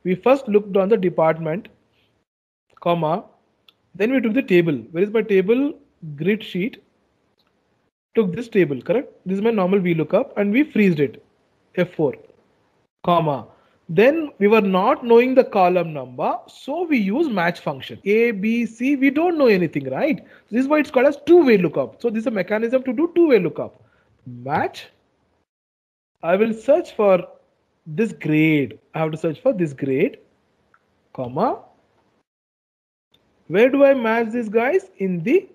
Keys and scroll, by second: 10.5 F4.